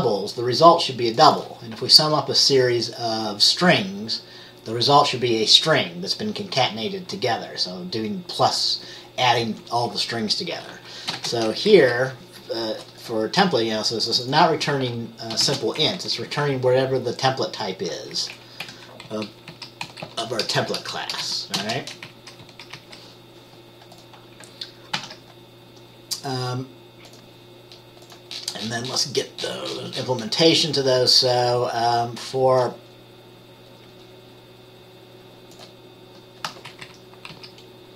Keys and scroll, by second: 11.3 t, 11.8 Down, 15.6 t, 16.1 Left, 16.5 Up, 18.7 Escape, 19.2 Right, 19.6 Down, 20.0 Right, 20.2 Right, 20.6 BackSpace, 20.7 BackSpace, 21.3 BackSpace, 21.8 t, 22.2 Up, 22.5 Left, 22.9 Up, 25.1 ctrl+s, 37.0 Up, 37.4 Down.